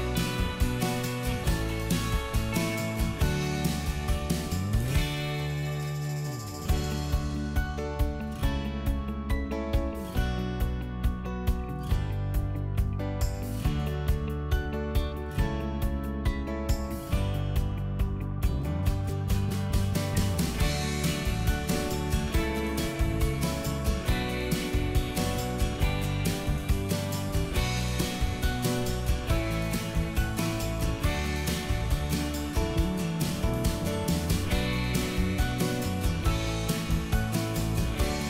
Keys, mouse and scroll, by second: 3.3 click, 3.6-4.3 scroll up 1, 4.3-5.7 middle drag, 5.9 click, 6.1 middle click, 8.1 click, 8.4 middle click, 8.9 click, 10.7 Delete, 11.1 middle click, 11.7 click, 12.0 c, 12.5 middle click, 15.9 click, 16.8 middle click, 17.2 scroll down 1, 17.9 ctrl+z, 18.1 click, 19.1 middle click, 19.9 ctrl+click, 22.0 ctrl+click, 23.8 middle click, 24.8 click, 26.4 x, 27.4 click, 28.5 right click, 30.1 click, 30.6 middle click, 31.0 click, 31.6 Delete, 32.3 middle click, 32.7 scroll up 1, 32.9 click, 33.2 Delete, 33.4 middle click, 33.7-34.2 scroll up 1, 34.2 ctrl+z, 34.5 click, 35.0 Delete, 35.6 scroll up 1, 36.3 click, 36.6 Delete, 36.8 scroll down 1, 37.5 middle click.